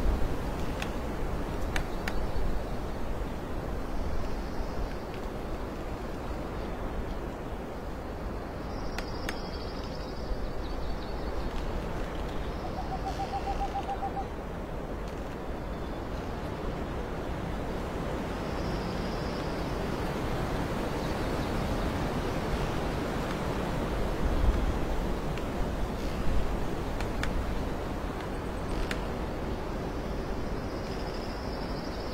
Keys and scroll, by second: 2.7 alt+space, 5.6 ctrl+z, 5.8 alt+space, 6.1 alt+space, 9.1 alt+space, 9.8 space, 11.0 space, 12.7 space, 13.9 space, 17.6 alt+space, 22.4 ctrl+z, 23.0 ctrl+shift+z, 23.7 alt+space, 24.8 alt+space.